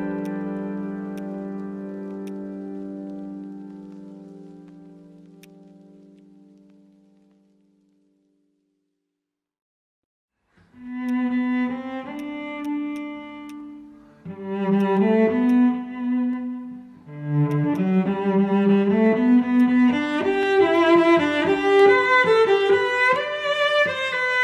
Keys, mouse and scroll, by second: 0.2 alt+click, 1.1 alt+click, 1.7 alt+middle click, 2.2 alt+click, 11.5 scroll up 1, 12.6 alt+click, 13.2 alt+middle click, 13.4 alt+click, 14.4 alt+middle click, 14.7 alt+click, 15.4 alt+middle click, 18.4 scroll up 1, 18.7 scroll down 1, 19.9 scroll up 1, 20.7 alt+click, 21.9-22.3 scroll down 1, 22.3-23.3 scroll up 1, 23.3 scroll down 1.